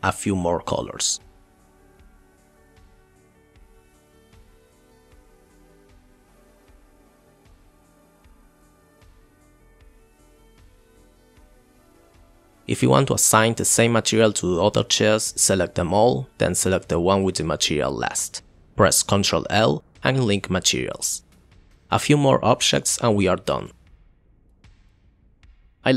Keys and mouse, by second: 1.2 click, 2.0 click, 2.2 middle click, 2.5 click, 3.0 middle click, 3.2 click, 3.3 middle click, 3.6 middle click, 3.9 click, 4.0 click, 4.3 click, 4.4 click, 4.5 click, 6.5 click, 9.0 click, 9.4 click, 12.0 click, 13.7 shift+click, 14.2 shift+click, 17.8 shift+click, 21.1 click, 23.0 click, 23.5 click, 23.6 click, 23.8 click.